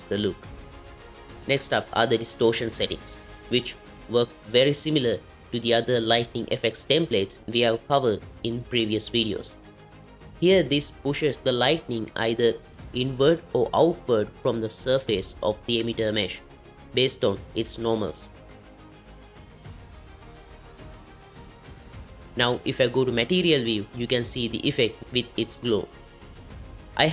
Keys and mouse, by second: 8.8-10.1 drag, 12.1-14.5 drag, 15.2 click, 18.2 space, 22.2 space, 22.7 z, 24.6 click.